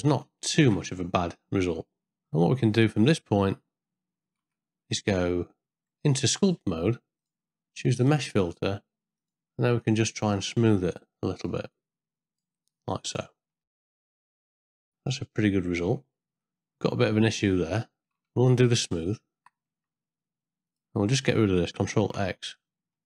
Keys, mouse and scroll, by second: 0.1 ctrl+middle click, 0.4 shift+middle click, 1.2-3.6 middle drag, 4.4 z, 5.1 middle click, 6.2 Tab, 8.0 click, 9.2 click, 10.9 click, 11.4-12.4 drag, 12.7 middle click, 13.7 ctrl+middle click, 13.9 shift+middle click, 14.0-15.9 middle drag, 16.4 ctrl+middle click, 18.0 Tab, 18.2 ctrl+z, 18.8 ctrl+z, 19.7 Tab, 20.7 click, 22.0 ctrl+x, 22.6 ctrl+middle click.